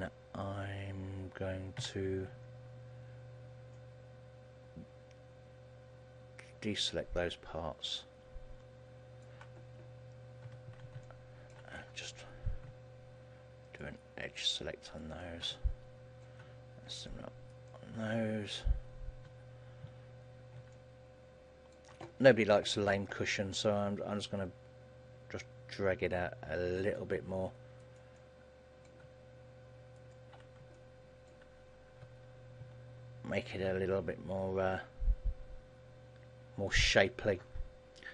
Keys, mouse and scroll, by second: 11.2 shift+middle click, 11.9-13.0 scroll up 7, 13.8 alt+shift+right click, 14.4 alt+shift+right click, 15.2 alt+shift+right click, 15.7 middle click, 17.0 alt+shift+right click, 17.6 alt+shift+right click, 18.2-19.2 scroll down 3, 19.8 KP_1, 20.4 KP_3, 20.8 shift+middle click, 23.8 g, 27.1 click, 28.0 alt+right click, 28.2 middle click, 30.0 alt+shift+right click, 30.9 middle click, 32.2 KP_1, 32.8 KP_3, 34.2 g, 37.0 click.